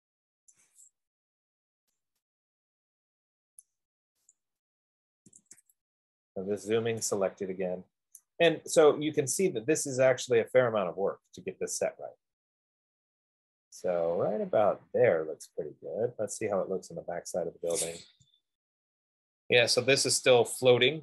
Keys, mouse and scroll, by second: 0.7 right click, 1.5 Escape, 4.0 right click, 4.6 click, 5.6-6.0 typing, 6.7-7.4 scroll, 8.1-8.8 typing, 8.5 right click, 12.2-13.6 right drag, 15.8-18.1 drag, 18.1 right click, 18.5 Escape, 19.2 F15, 19.4 middle click.